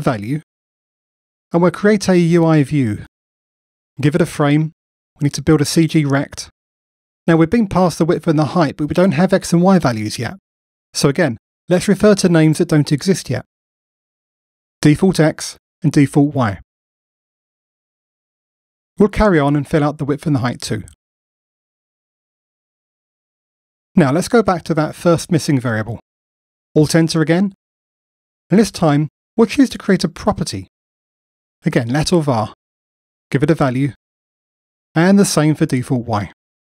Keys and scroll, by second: 4.1 Return, 16.9 Tab, 22.0 Return, 22.8 Tab, 23.5 Return, 25.2 F2, 27.3 alt+Return, 31.6 Return, 36.3 F2.